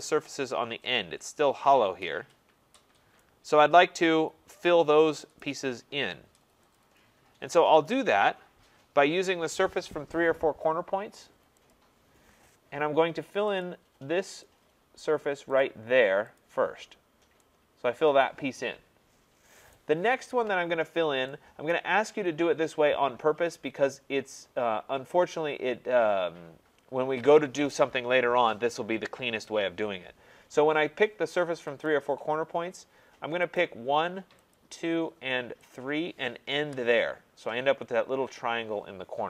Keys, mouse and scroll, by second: 0.0 right click, 0.4 middle click, 0.4 middle click, 3.2 right click, 5.4 right click, 6.1 middle click, 6.1 middle click, 6.2 middle click, 6.8 click, 11.8 click, 13.6 click, 14.5 click, 15.6 click, 16.4 click, 19.7 right click, 20.1 middle click, 20.8 middle click, 20.9 middle click, 21.7 right click, 22.1 middle click, 31.9 click, 33.6 click, 34.5 click, 35.7 click, 36.6 Return.